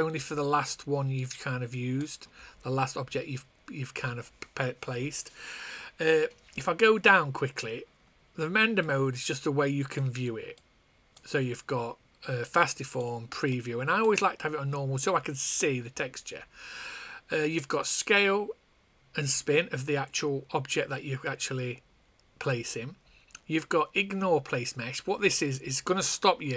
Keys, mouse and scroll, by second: 8.7 click, 11.3 click, 13.1 click.